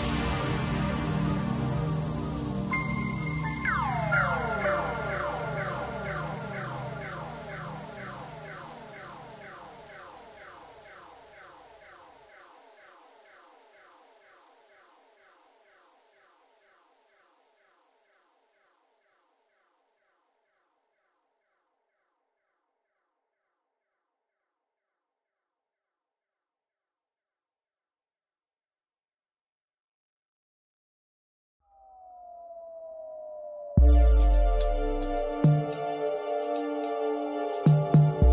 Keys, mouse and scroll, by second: 1.3 click, 4.2 drag, 5.2-7.5 middle drag, 7.5 click, 8.3 click, 8.9-9.8 middle drag, 9.8 click, 10.2-10.5 scroll down 2, 10.5-11.1 middle drag, 11.1-11.8 scroll up 1, 11.8 Tab, 12.7-13.8 middle drag, 13.8-14.6 scroll up 2, 14.6 g, 19.2 KP_1, 20.4-21.4 middle drag, 21.4 scroll up 1, 22.0 KP_1, 23.4 Tab, 24.5 g, 27.6-29.1 middle drag, 29.1-29.5 scroll down 2, 29.5-31.6 middle drag, 31.6-31.9 scroll up 1, 31.9-33.3 middle drag, 33.3 Tab, 34.8 ctrl+r.